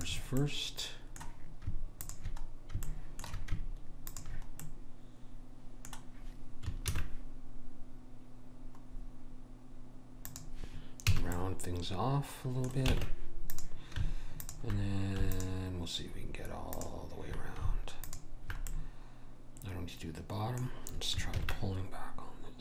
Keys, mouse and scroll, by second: 0.9 click, 1.7-5.7 middle drag, 5.7 click, 6.9 ctrl+b, 11.1 a, 11.4 middle click, 13.0 ctrl+Tab, 14.4-19.9 drag, 18.7-20.4 middle drag, 21.4 ctrl+b.